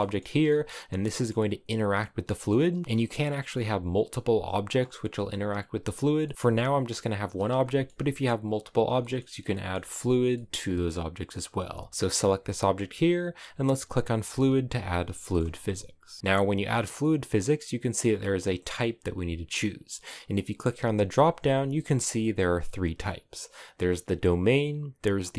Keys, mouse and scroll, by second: 0.2-0.6 scroll up 2, 0.9 shift+middle click, 1.8 scroll down 1, 2.0-6.3 shift+middle drag, 6.3 g, 7.3-11.5 shift+middle drag, 11.5 g, 14.0 click, 14.9-25.3 shift+middle drag.